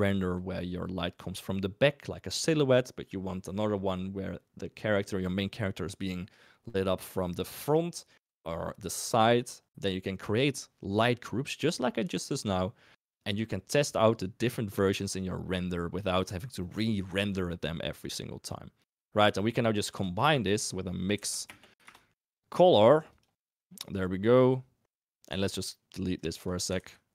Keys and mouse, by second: 19.8 shift+a, 23.7 click, 25.4 ctrl+right click, 26.2 ctrl+right click, 26.6 click, 26.7 ctrl+x.